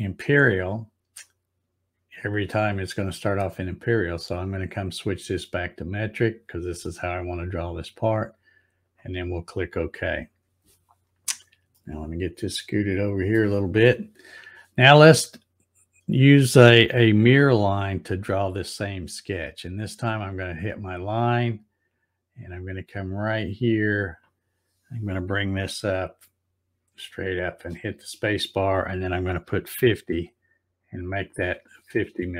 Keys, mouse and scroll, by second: 4.2 click, 5.7 click, 8.8 click, 11.7 shift+middle click, 20.7 click, 23.1-27.7 drag, 27.5 space.